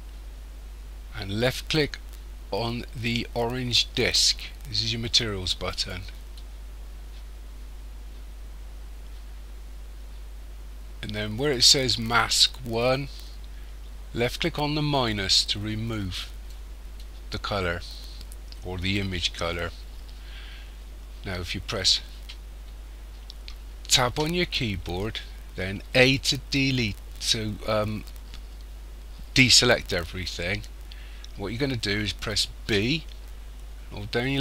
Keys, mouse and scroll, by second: 5.7 click, 15.9 click, 24.0 Tab, 25.9 a, 32.6 b.